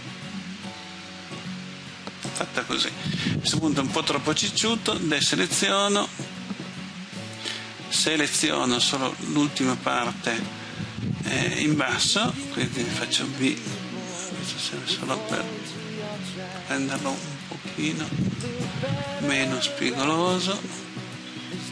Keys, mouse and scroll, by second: 2.3 click, 5.2 a, 6.7-7.5 scroll up 1, 13.1 b, 18.5-21.7 drag.